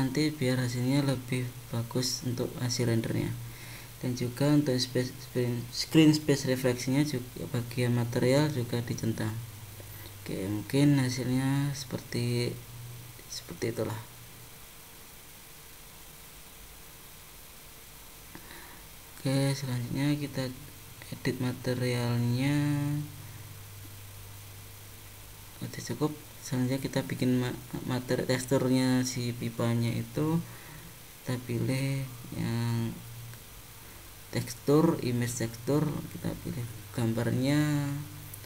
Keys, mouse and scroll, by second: 2.0 click, 2.6-3.3 scroll down 10, 5.8 click, 7.5 middle click, 9.4-10.0 scroll up 3, 10.0 middle click, 13.3-14.0 scroll down 4, 17.2 click, 21.0-21.7 scroll up 4, 25.3 click, 28.7 click, 30.4 click, 31.8 click, 32.8 click, 37.5 click.